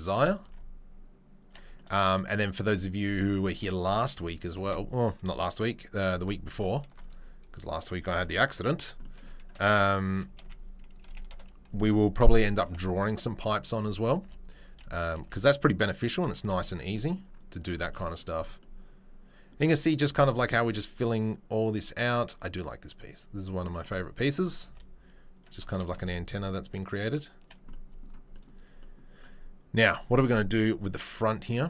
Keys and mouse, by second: 0.4 s, 4.6 shift+d, 6.1 g, 7.0 s, 7.9 g, 10.1 r, 12.2-22.3 middle drag, 12.2 KP_3, 12.5 KP_1, 13.4 ctrl+KP_3, 14.2 g, 14.7 s, 15.2 g, 16.3 z, 22.3-23.9 right drag, 23.9-31.6 middle drag, 24.6 s, 25.9 s, 28.9 2.